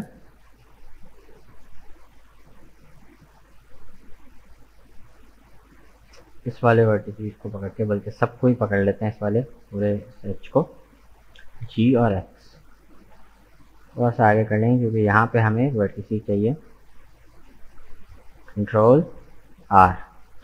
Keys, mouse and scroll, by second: 2.9 right click, 3.5 shift+right click, 4.0 shift+right click, 4.5 shift+right click, 5.0 shift+right click, 5.5 shift+right click, 5.9 shift+right click, 7.2-8.6 middle drag, 8.6 alt+right click, 9.3-11.6 middle drag, 11.6 g, 19.6 ctrl+r.